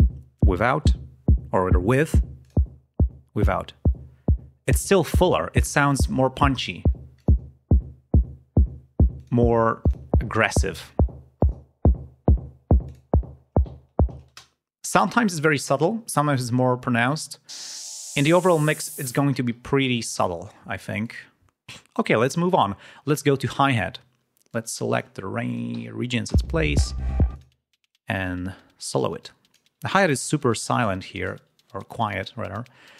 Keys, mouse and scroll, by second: 2.3 click, 7.1 click, 9.1 click, 9.7 click, 11.3 click, 12.8 click, 13.6 ctrl+scroll down 2, 14.2 ctrl+space, 17.4 click, 18.9 ctrl+alt+p, 20.9 click, 23.4 click, 24.4 click, 26.2 l, 27.2 click, 28.9 click, 29.8 ctrl+scroll up 2, 31.1 click.